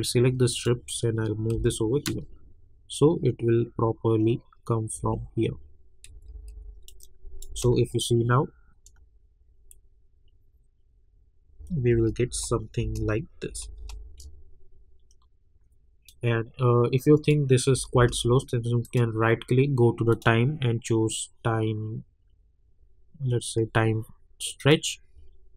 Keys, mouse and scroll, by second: 1.5 [, 2.1 space, 4.9 space, 6.0 -, 6.8 -, 6.9 click, 7.5 space, 11.9 space, 16.0-17.7 drag, 17.7 space, 18.8 right click, 20.1 click, 24.6 click.